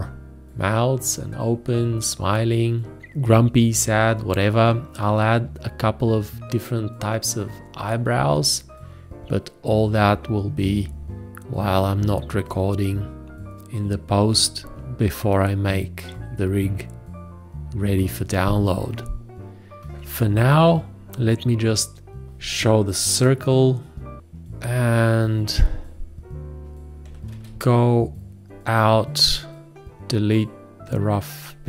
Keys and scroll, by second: 27.3 ctrl+a.